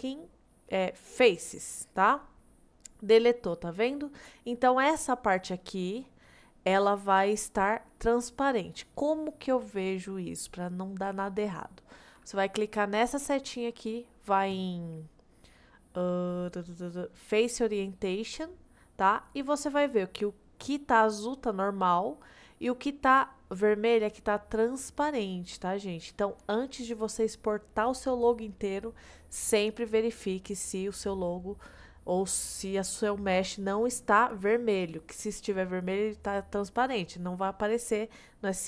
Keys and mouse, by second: 2.3-4.6 middle drag, 13.2-18.9 drag, 19.2-20.6 middle drag, 21.8 middle click, 25.1-26.5 middle drag, 30.5-32.1 middle drag.